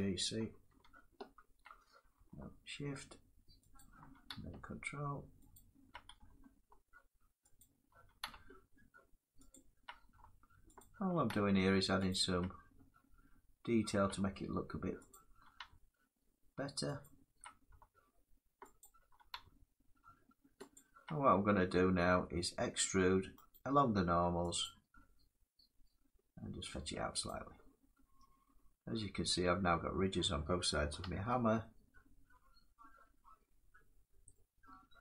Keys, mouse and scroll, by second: 0.9 ctrl+7, 3.5 shift+click, 5.3 ctrl+click, 7.3 shift+click, 9.2 ctrl+click, 10.5 shift+click, 11.8 ctrl+click, 12.4 scroll down 5, 12.4 scroll down 1, 13.1 scroll up 2, 14.8 shift+click, 16.7 ctrl+click, 16.8 middle click, 18.5 shift+click, 20.5 ctrl+click, 21.8 middle click, 23.2 right click, 24.3 ctrl+click, 25.3-27.8 ctrl+drag, 28.4-29.9 drag, 30.0 middle click, 30.9 Tab, 32.3 middle click, 34.0 middle click, 34.3 middle click, 34.4 middle click.